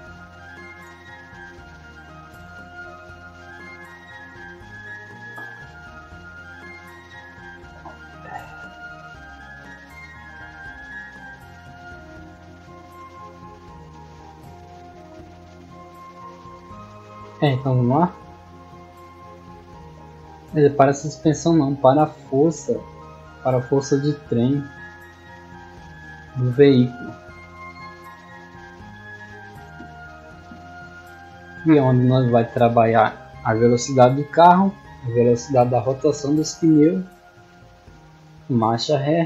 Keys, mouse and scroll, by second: 18.4 scroll down 2, 21.6 click, 24.7 click, 25.5-25.9 scroll up 1, 26.0-27.4 scroll up 2, 28.6 click, 30.0 click, 30.6-31.4 scroll up 1, 31.4-35.4 scroll up 1, 35.4 scroll down 1.